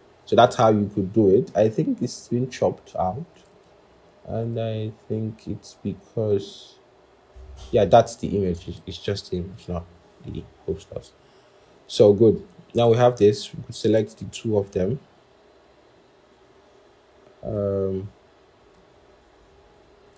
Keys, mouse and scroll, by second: 3.4 double click, 8.5 double click, 10.2-10.6 scroll, 11.5-13.2 scroll, 14.1 shift+click, 20.0 shift+click.